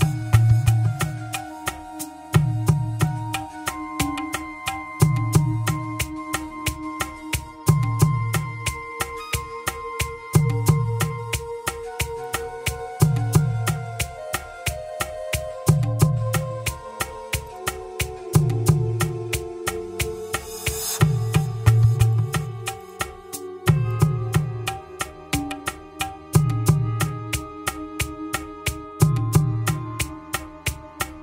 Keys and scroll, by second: 10.6 ctrl+c, 14.2 ctrl+h, 20.7 BackSpace, 24.5 ctrl+s.